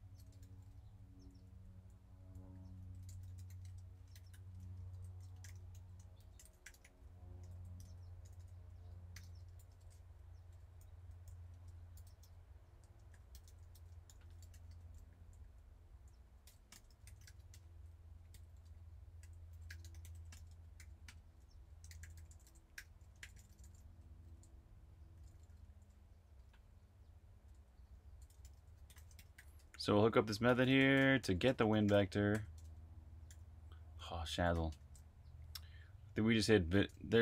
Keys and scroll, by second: 0.0-3.9 typing, 5.7-27.3 typing, 28.4-29.6 typing, 34.1-35.0 typing.